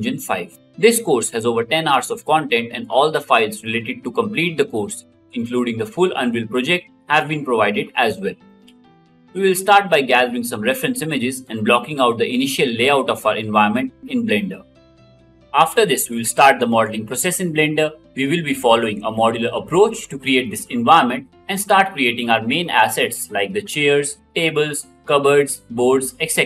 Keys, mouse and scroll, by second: 1.7 w, 3.2 d, 4.3 s, 7.0 a, 7.2 s, 7.5 w, 7.6 a, 9.1 s, 11.7 w, 11.8 d, 12.3 d, 13.5 d, 18.6 d, 21.5 middle click, 25.0-26.4 drag.